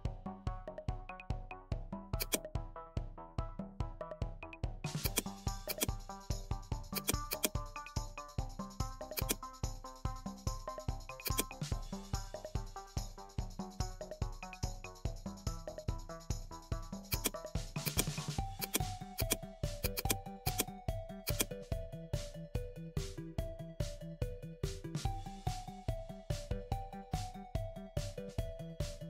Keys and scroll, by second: 22.3 Down, 23.6 Up, 24.0 Down, 24.7 Up, 25.8 Down, 28.5 Up.